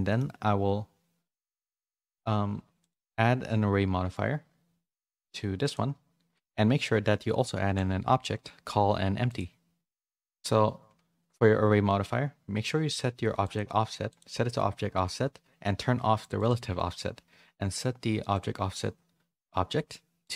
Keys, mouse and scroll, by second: 1.3 click, 2.8 click, 4.8 click, 7.5 shift+a, 10.2 click, 13.4 click, 14.0 click, 16.3 click.